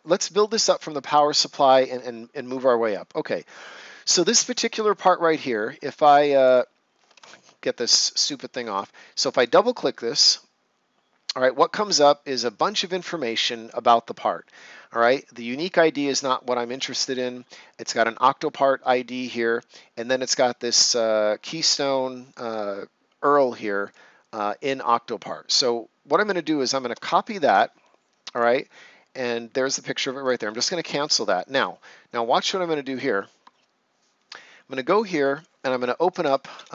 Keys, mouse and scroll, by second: 0.1 right click, 6.3 click, 8.1 ctrl+scroll up 1, 9.2 click, 22.2 click, 26.2 shift+End, 27.3 ctrl+c, 28.3 click, 32.8 click, 35.2 click, 35.8-36.7 typing.